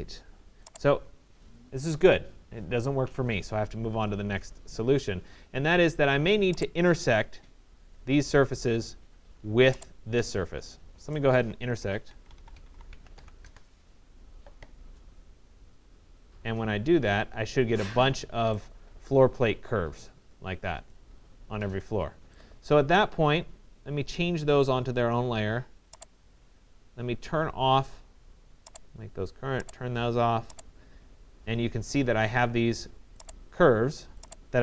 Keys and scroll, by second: 5.3 Escape, 12.5 c, 13.5 Return.